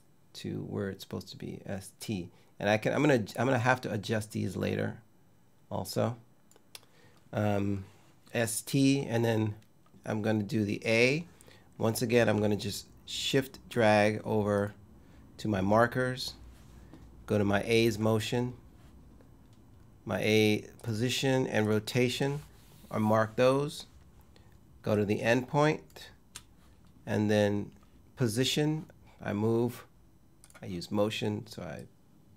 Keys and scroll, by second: 9.9 space.